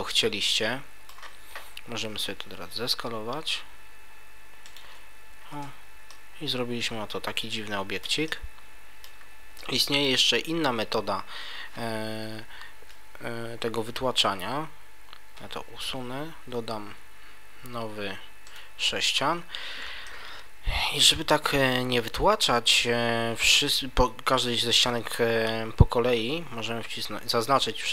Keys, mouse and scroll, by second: 2.5 s, 4.7 click, 5.5 Tab, 6.1 middle click, 8.3 middle click, 15.2 Delete, 16.5 shift+a, 19.1 scroll up 1, 19.3 Tab, 20.0 middle click.